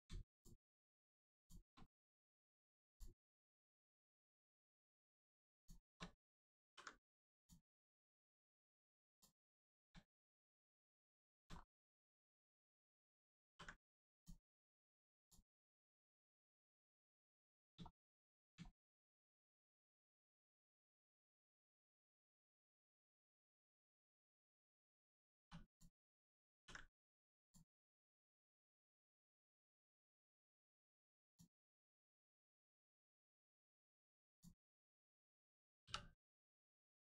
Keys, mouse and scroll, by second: 0.3 shift+click, 1.9 middle click, 2.9 shift+click, 3.2 shift+middle click, 4.4 ctrl+middle click, 5.6 shift+click, 6.6 ctrl+e, 7.4 click, 8.6 middle click, 9.1 click, 9.6 shift+middle click, 10.4 middle click, 11.1 middle click, 11.6 scroll up 1, 12.6 click, 13.5 ctrl+e, 14.2 click, 16.4 middle click, 17.1 shift+middle click, 17.6 scroll down 1, 17.9 shift+middle click, 18.2 middle click, 18.3 middle click, 18.7 shift+middle click, 19.4 scroll down 1, 20.2 middle click, 22.9 shift+middle click, 23.3 scroll up 1, 23.4 middle click, 24.5 scroll down 1, 25.4 2, 25.6 click, 26.6 ctrl+e, 27.4 click, 28.0 middle click, 31.3 click, 31.7 middle click, 32.9 scroll up 1, 32.9 middle click, 34.3 click, 34.6 middle click, 36.4 click, 36.9 middle click.